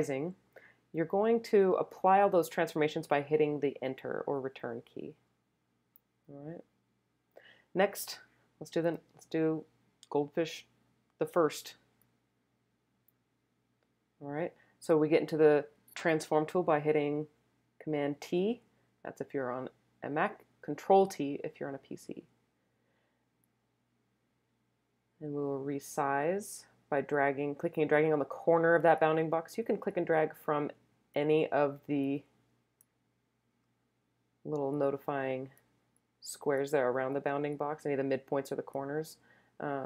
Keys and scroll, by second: 3.8 Return, 18.1 super+t.